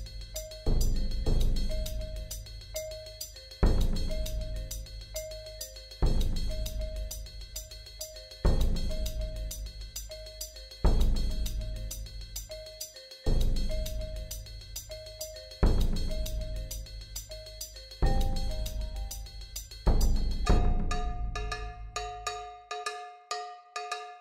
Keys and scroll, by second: 5.6 v, 7.7 ctrl+z, 9.1 ctrl+z, 13.7 i, 17.3 alt+shift+Delete, 19.2 v.